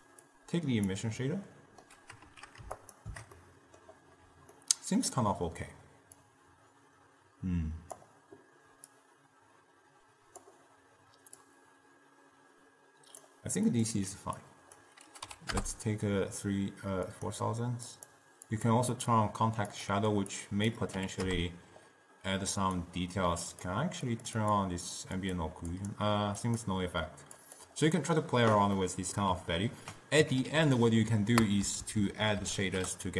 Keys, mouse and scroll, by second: 0.4-1.4 drag, 1.4-2.9 middle drag, 2.9 ctrl+shift+click, 3.5-4.7 middle drag, 4.7-5.8 scroll down 2, 5.8 middle click, 6.3-16.9 drag, 17.2-18.3 drag, 18.6 click, 19.0 click, 19.9-22.9 drag, 23.6 click, 24.2 click, 24.5 click, 25.3 click, 25.9 drag, 26.7 click, 27.5 click, 28.9 middle click, 29.8 ctrl+a, 30.7 d, 32.0 Down, 32.1 Down, 32.5 Up, 32.6 Up.